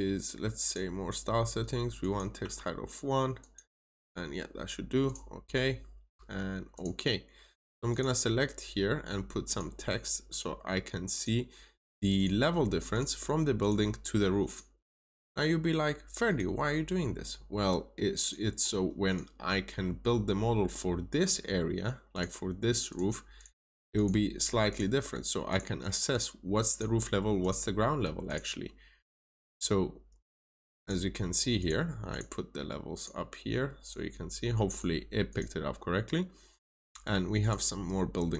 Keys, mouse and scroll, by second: 2.3 typing, 3.3 click, 23.3 double click, 23.9 click, 29.3 double click, 30.3 click, 30.7 double click, 31.5 click.